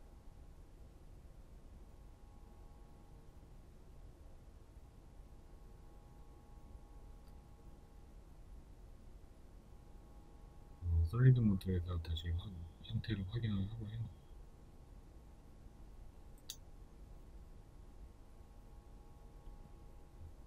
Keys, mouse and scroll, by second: 2.4-5.5 shift+middle drag, 2.7-3.1 scroll up 2, 4.2-4.8 scroll down 2, 4.8-5.5 scroll up 2, 5.5 right click, 6.1 right click, 9.3 z, 10.0 right click, 10.9 right click, 11.3 Tab, 12.0-13.6 shift+middle drag, 12.3-12.8 scroll up 2, 13.6 right click, 14.2-20.1 shift+middle drag, 14.5 scroll down 1, 17.1 KP_3, 20.1 Tab.